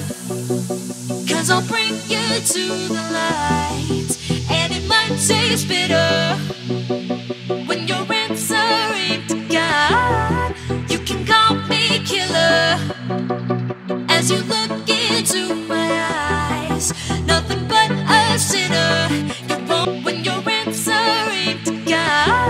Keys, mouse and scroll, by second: 2.7 ctrl+c, 3.0 alt+Tab, 3.9 alt+click, 4.5 v, 5.1 click, 10.7 alt+Tab, 11.5 click, 11.9 c, 12.2 Tab, 12.8 ctrl+v, 13.6 click, 17.6-18.4 scroll down 1, 18.4 click, 19.8 KP_Add, 20.3 KP_9, 22.1 Return.